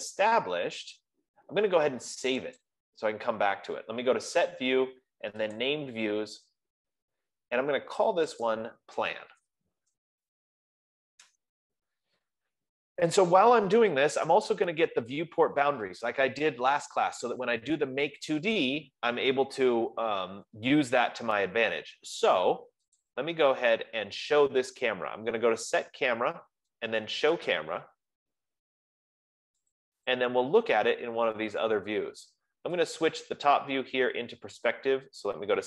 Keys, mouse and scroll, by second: 2.2 middle click, 3.1 click, 6.1 click, 8.9 click, 10.1-11.4 typing, 11.7 Return, 14.7 click, 16.6-19.6 drag, 23.5-26.8 drag, 27.9 click, 30.4 click, 31.5 click, 33.4 click, 35.4 F15.